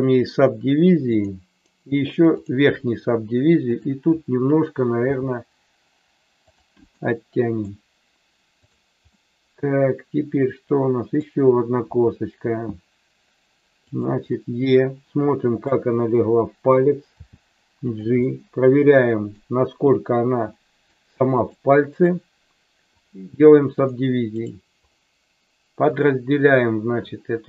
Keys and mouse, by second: 3.7 click, 5.0 g, 6.5 click, 6.8 middle click, 8.6 click, 9.1-11.1 middle drag, 11.8 e, 13.8 click, 14.3-15.6 middle drag, 17.1 g, 17.8 click, 18.1-19.2 middle drag, 20.6 middle click, 21.4 click.